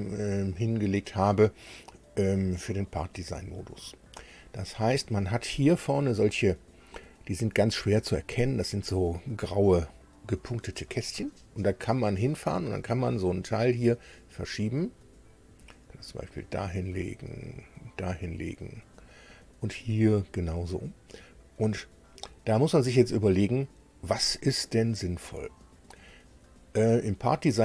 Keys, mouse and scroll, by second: 12.4-18.7 drag.